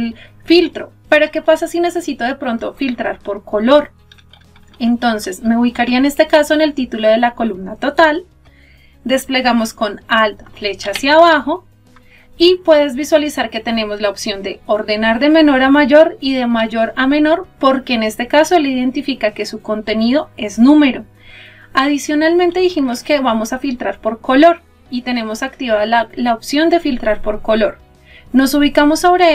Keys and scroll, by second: 10.3 alt+Down.